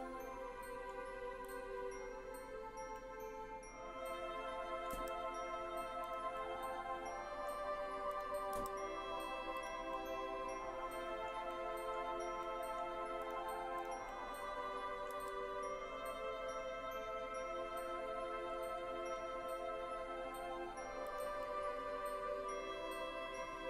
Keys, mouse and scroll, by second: 1.6 click, 3.0-5.0 middle drag, 5.0 g, 6.2 click, 6.4-7.6 middle drag, 8.2 click, 8.6 g, 9.6 click, 9.6 g, 10.0-11.3 middle drag, 11.5 middle click, 12.6 middle click, 13.2 click, 13.8 click, 14.1-15.2 middle drag, 15.2 g, 17.8-20.4 scroll down 12, 21.2 click, 21.6-23.6 middle drag.